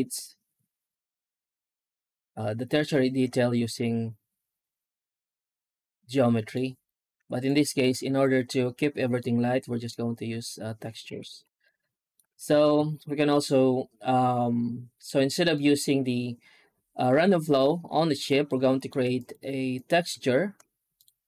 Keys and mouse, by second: 3.6-6.4 middle drag, 6.7 right click, 7.0 x, 7.6 right click, 7.9 Tab, 9.0 middle click, 11.0 alt+a, 11.1 Tab, 11.5 alt+middle drag, 11.8 alt+middle click, 12.4 ctrl+s, 12.8-14.9 shift+middle drag, 15.4-15.7 middle drag, 18.0 right drag, 18.3-18.7 alt+middle drag, 19.7 shift+click, 20.0 shift+a.